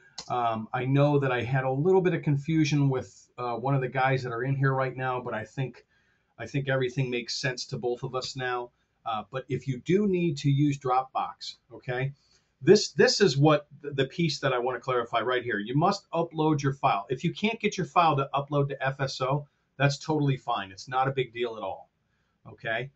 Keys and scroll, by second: 0.1 space.